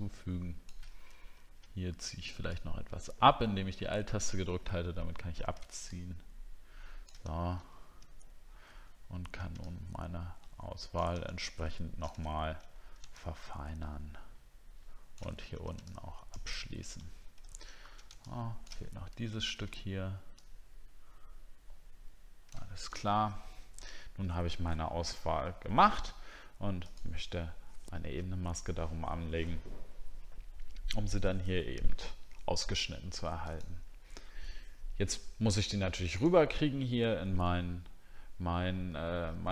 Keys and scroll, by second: 7.6 alt+scroll down 1, 12.3 alt+scroll down 3, 17.4 alt+scroll up 1, 19.3 alt+scroll up 1, 22.9 alt+scroll down 1, 23.8-24.8 alt+scroll up 1.